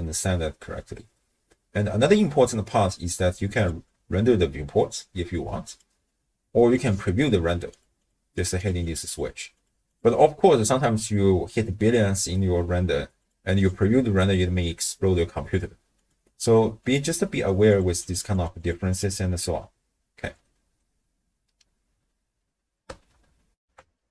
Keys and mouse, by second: 3.5 click, 5.7 click, 6.7 click, 7.7 click, 8.0 click, 8.6 click, 8.8 click, 9.1 click, 9.9-12.6 drag, 13.2 click, 13.6 click, 16.0 click, 16.9 click, 17.7 click, 18.0 click, 18.4 click, 18.6 click, 18.9 click, 20.4 middle click, 23.6 ctrl+alt+shift+w, 23.8 ctrl+alt+shift+q.